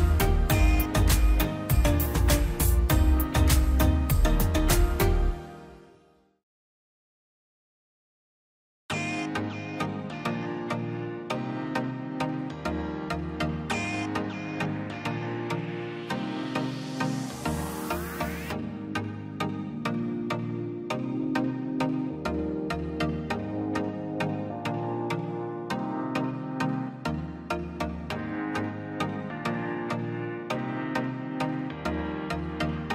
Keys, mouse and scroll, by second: 0.4 scroll down 1, 0.7 middle click, 2.1 r, 2.9-4.2 drag, 4.2 middle click, 4.7 scroll up 1, 5.2-8.8 drag, 8.8 Escape, 9.4 l, 9.8 click, 10.7 space, 11.5 r, 11.9 click, 12.9 scroll down 1, 13.0 middle click, 13.9 middle click, 15.0 l, 15.8 click, 16.3 space, 17.0 r, 17.5 click, 18.4 scroll up 1, 18.7 click, 19.5 scroll down 1, 19.6 space, 20.1 middle click, 20.6 scroll down 1, 20.8 middle click, 21.5 scroll up 1, 22.7 e, 22.8 click, 23.6 scroll down 1, 23.8 scroll up 1, 24.0 click, 24.5-24.8 scroll down 1, 25.1 middle click, 26.0-26.4 scroll down 1, 26.5 space, 26.6 click, 26.8 scroll down 1, 27.0-28.3 middle drag, 28.3 click, 29.7 scroll down 1, 30.0 middle click, 30.7 middle click, 31.1 scroll up 1, 32.3 click, 32.6-32.9 scroll up 1.